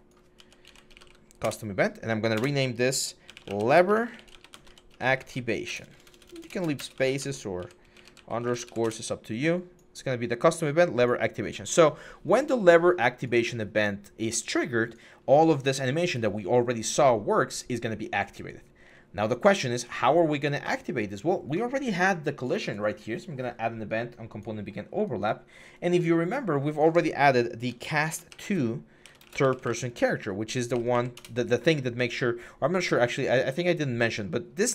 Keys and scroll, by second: 0.0-0.8 typing, 1.2 Return, 2.1-8.6 typing, 8.6 Return, 27.5-29.4 typing, 30.5 Up, 30.7 Up, 30.9 Return.